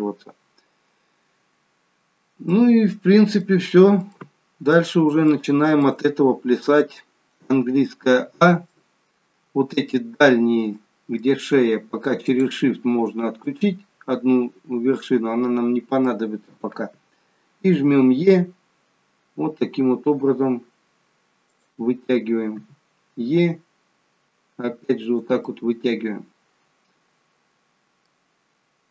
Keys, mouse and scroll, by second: 2.9-3.4 scroll down 2, 3.4 middle click, 4.1 middle click, 5.3 shift+middle click, 8.2 a, 8.7 middle click, 10.3-10.8 scroll up 2, 10.8 middle click, 12.4 shift+click, 13.4 middle click, 25.5 middle click.